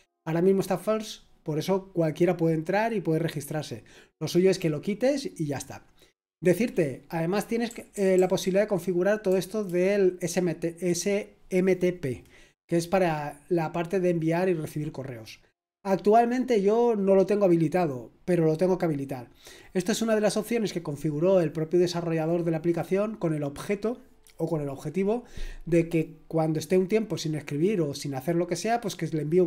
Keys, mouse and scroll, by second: 7.6-9.6 typing.